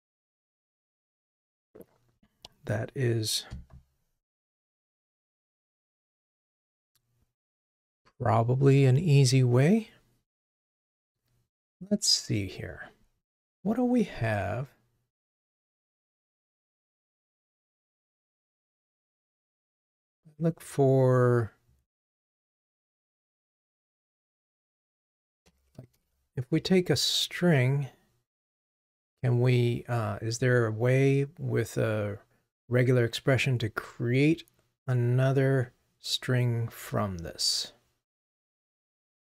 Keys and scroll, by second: 17.5 shift+super+d.